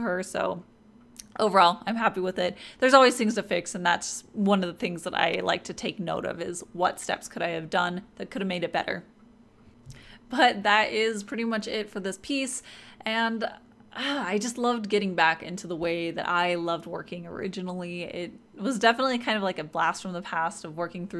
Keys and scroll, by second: 0.7-3.6 typing.